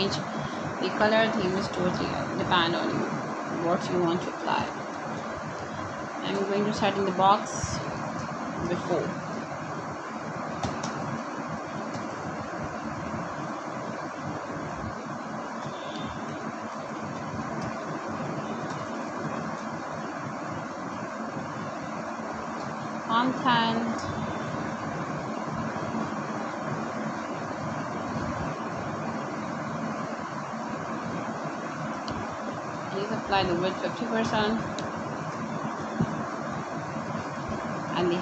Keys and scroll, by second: 0.0 Return, 0.7-4.0 typing, 5.3 n, 6.8 Down, 7.1 Return, 11.6 shift+', 13.0 Right, 15.1 Return, 16.4 w, 16.9 i, 18.7 Return, 19.2 5, 19.7 0, 20.7 shift+5, 21.3 ;, 21.5 Return, 23.3 h, 23.6 e, 24.1 Return, 24.9 7, 25.2 5, 25.8 shift+5, 27.0 Right, 27.9 Return, 30.1-31.3 typing, 32.2 Down, 34.7 Return, 36.7 2.